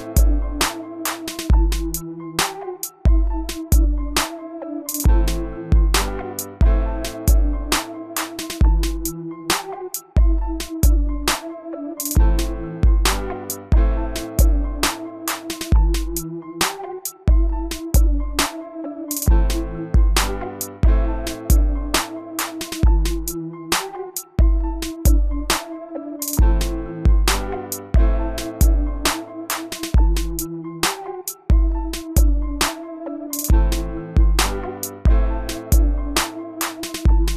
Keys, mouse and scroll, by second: 1.9 2, 3.1 5, 3.6 Return, 5.6-6.7 drag, 10.2 s, 10.9-19.4 drag, 20.9-21.3 typing, 21.9 Return, 25.5-26.0 typing, 26.3 Return, 27.6-28.7 drag, 28.9 middle click, 30.1-37.3 drag.